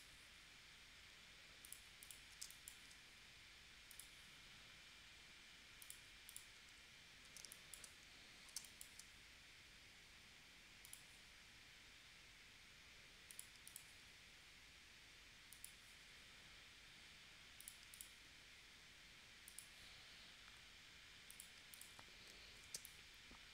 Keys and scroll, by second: 2.4 space, 7.5 space, 8.6 space, 22.7 space.